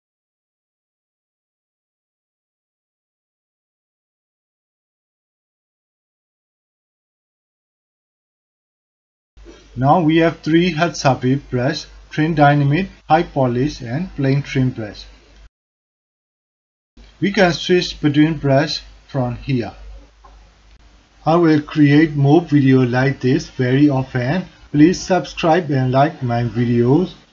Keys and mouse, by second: 1.3-3.5 drag, 3.7 alt+shift+middle click, 4.3 click, 5.3 alt+middle click, 5.5 alt+click, 5.9-9.6 drag, 9.8 alt+click, 10.2 ctrl+alt+click, 10.5 alt+shift+click, 10.8 click, 11.8 drag, 12.3 ctrl+alt+click, 16.6 click, 17.5 click, 18.3-20.4 drag, 20.9 alt+click, 21.7 ctrl+alt+click, 22.9 alt+click, 23.3 ctrl+alt+click, 23.7 alt+shift+click, 24.0 alt+click, 26.7 click.